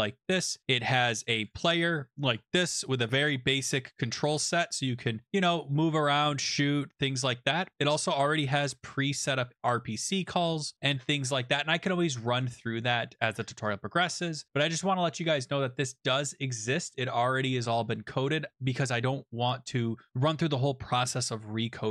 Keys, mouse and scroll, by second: 1.4 click, 1.5 click, 2.1-2.7 scroll, 4.4 click, 5.0-5.5 scroll, 5.9 scroll, 7.0 scroll, 8.8 click, 9.9 click, 10.5-11.6 scroll, 14.7-15.9 scroll, 21.0 scroll.